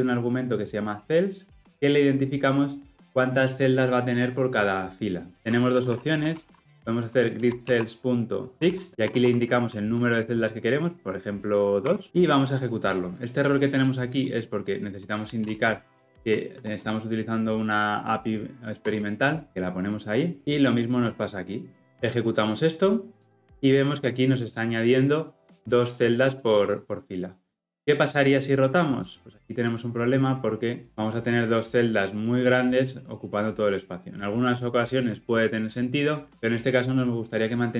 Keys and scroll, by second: 7.4 Return, 9.5 ctrl+p, 15.4 alt+Return, 19.5 ctrl+alt+o, 23.3 shift+F10.